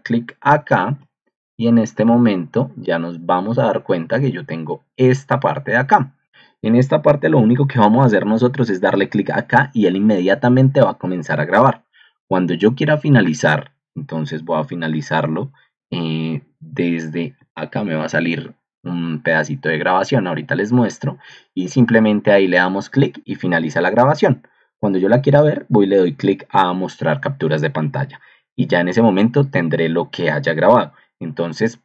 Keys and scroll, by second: 0.5 ctrl+2, 2.1 ctrl+2.